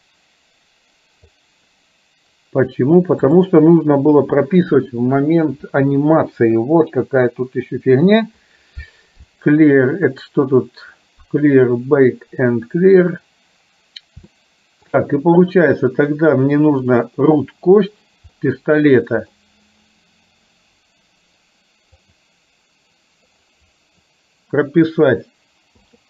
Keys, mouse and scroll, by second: 3.4 click, 10.1 click, 14.4 shift+middle click, 18.5 middle click, 22.1 click, 25.9 i.